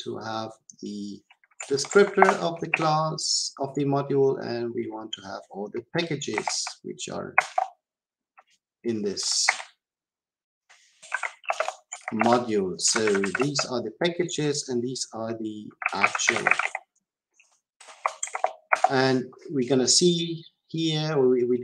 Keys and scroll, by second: 7.4 Return.